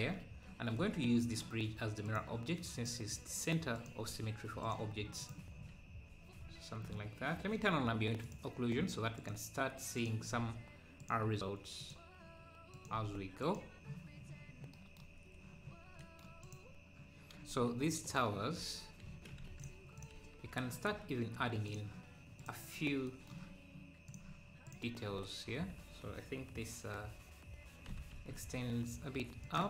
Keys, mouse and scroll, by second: 0.1 `, 2.0-5.5 drag, 5.5 scroll down 1, 6.4-7.2 scroll up 2, 8.2-14.8 drag, 16.4 click, 20.1 click, 21.3 click, 22.8 click, 22.8 scroll up 2, 25.1 click, 25.1 scroll up 3, 25.6-26.6 scroll down 1, 26.6-27.3 scroll down 1.